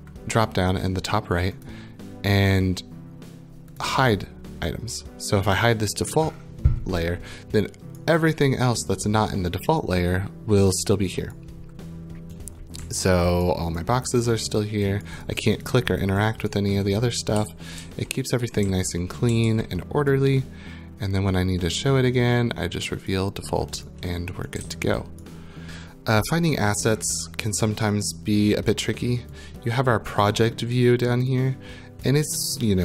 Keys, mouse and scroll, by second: 1.6 click, 3.8 click, 8.0 right click, 11.3 right click, 12.8 w, 13.4 right click, 13.8 click, 14.3 click, 14.6 click, 15.0 right click, 15.2 click, 15.4 click, 15.6 click, 15.8 click, 16.0 click, 16.5 right click, 16.8 click, 17.4-19.9 typing, 20.1 right click, 21.6 click, 23.1 click, 24.3 right click, 24.3-25.1 typing, 25.2 right click, 30.1 click, 32.0 click, 32.6 click.